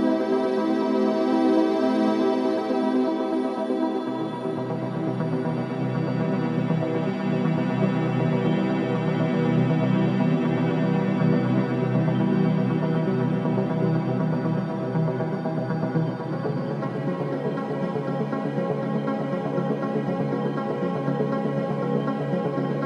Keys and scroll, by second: 2.3 space, 4.8 space.